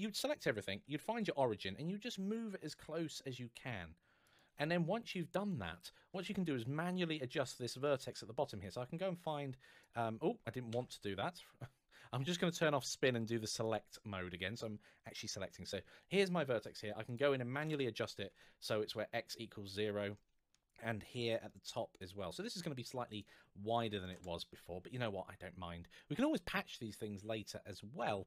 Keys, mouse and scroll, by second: 1.3 g, 4.1 click, 4.6-5.2 scroll up 1, 5.3 shift+middle click, 6.3 middle click, 6.6-7.5 scroll up 1, 8.4 middle click, 8.5 click, 10.5 ctrl+z, 13.4 click, 16.8 click, 17.4 KP_0, 17.5 Return, 18.4-19.0 scroll down 1, 19.1 shift+middle click, 20.6 scroll up 2, 21.8 shift+middle click, 21.9 click, 23.8 KP_0, 23.9 Return, 25.4-27.0 scroll down 1, 27.0 scroll down 1.